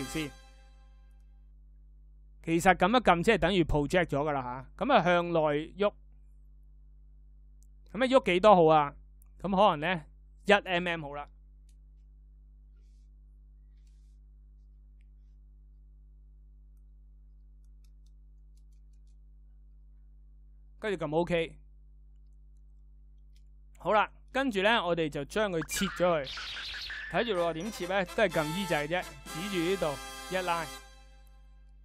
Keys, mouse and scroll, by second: 25.5 e.